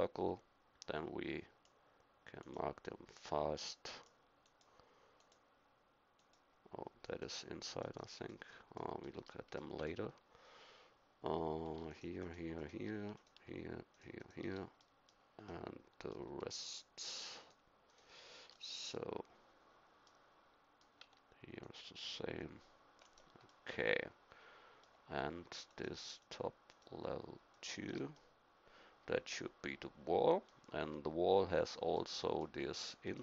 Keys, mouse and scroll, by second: 8.3-20.1 middle drag, 21.0 c, 28.2-29.9 middle drag, 33.1-33.2 middle drag.